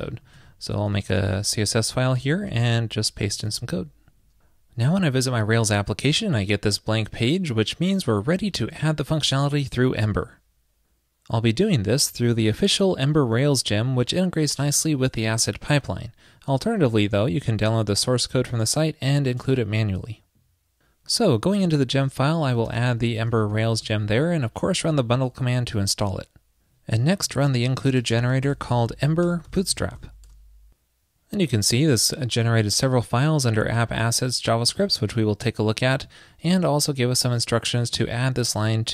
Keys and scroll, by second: 2.6 super+v, 24.2 super+s.